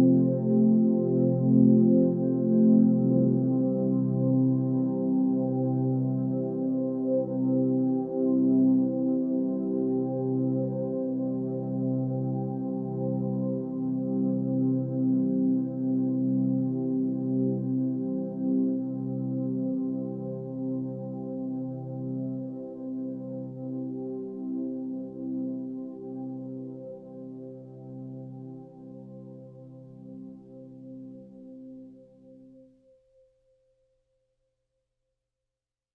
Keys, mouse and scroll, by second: 0.9 ctrl+space, 2.9 ctrl+space.